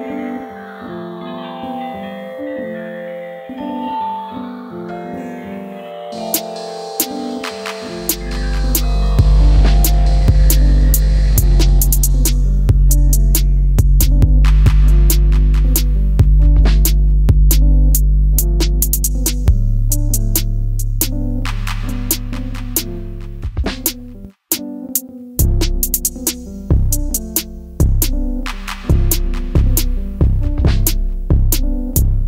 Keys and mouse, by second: 0.2 click, 0.8-1.8 middle drag, 2.3 KP_1, 3.4 KP_3, 4.7 r, 5.0 9, 5.1 0, 5.2 click, 6.1 KP_1, 9.8 Tab, 11.1 a, 11.8-14.3 drag, 14.5 Tab, 16.0 g, 16.9 click, 18.4 click, 19.4 s, 20.4 click, 21.0 r, 22.2 click, 23.7 click, 24.4-26.5 drag, 26.8 click, 28.3 click, 29.1 shift+d, 29.3 click.